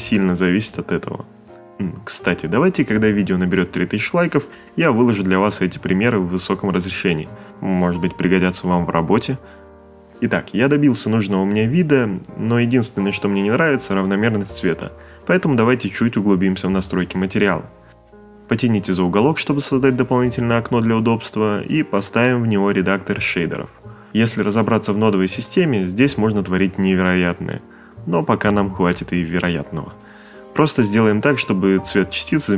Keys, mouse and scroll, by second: 8.8 click, 9.2 click, 10.8 click, 11.6 click, 12.7 click, 16.8 click, 21.5 click, 22.9 click, 23.8 ctrl+middle click, 24.4 middle click, 24.8 ctrl+middle click, 25.0 middle click, 25.9 click, 26.9 a, 27.1 click, 27.8 t, 30.1 space, 30.2 c, 31.0 click.